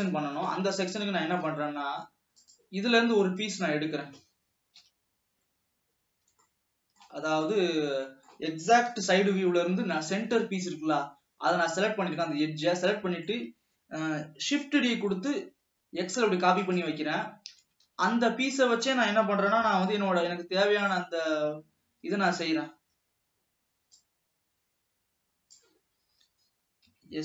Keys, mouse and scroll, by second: 0.6 scroll down 2, 0.8-2.8 middle drag, 2.8 click, 3.6 drag, 5.0 KP_7, 6.8-9.2 shift+middle drag, 9.2 KP_3, 10.1-11.4 scroll up 3, 11.4 scroll down 2, 11.8-12.9 middle drag, 12.9 scroll down 1, 13.2-14.7 middle drag, 14.7 shift+d, 17.9 s, 19.8 s, 21.4-22.2 scroll up 2, 22.2 w, 23.0 Escape, 24.2-27.1 drag, 27.1 s.